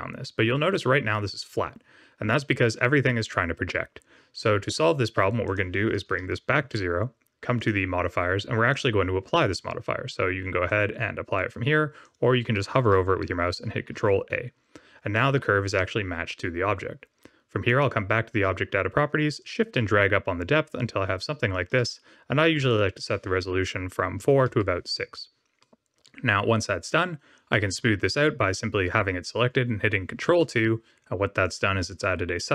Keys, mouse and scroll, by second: 5.4 click, 7.5 click, 8.7 click, 10.6 click, 13.9 ctrl+a, 15.1 middle click, 17.6 click, 19.3 shift+click, 22.6 click, 25.6 middle click, 27.5 middle click, 30.4 ctrl+2, 31.4 click.